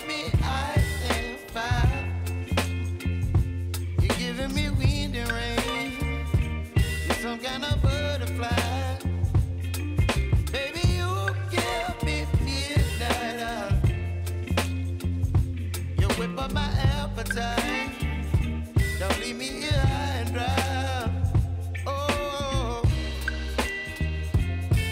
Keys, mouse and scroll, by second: 5.4 Return, 6.3-8.7 typing, 8.8 Return, 9.9 click, 11.3 ctrl+d, 12.9 Return, 13.6-14.6 typing, 14.7 Return, 17.1 click, 19.5 click, 19.9 right click, 23.0 click, 24.5 ctrl+a, 24.8-24.9 typing.